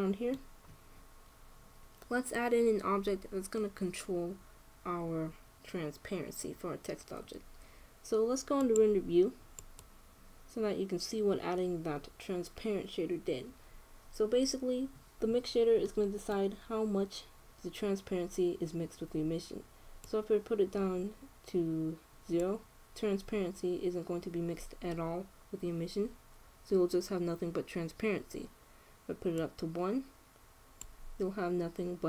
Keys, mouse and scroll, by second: 9.3-10.9 drag, 11.0 click, 16.0-18.5 middle drag, 20.8-22.5 drag, 30.1-31.8 drag.